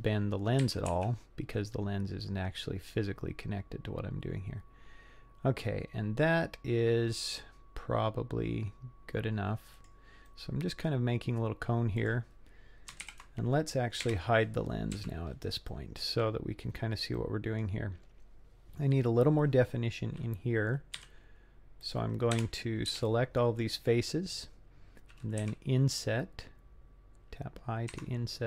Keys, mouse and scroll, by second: 0.6 g, 9.9 scroll down 1, 10.3 middle click, 12.0 click, 13.1 ctrl+l, 14.1 h, 15.0 z, 15.7 middle click, 16.6 scroll up 3, 17.2 middle click, 21.0 c, 22.4 3, 22.9 c, 25.4 i.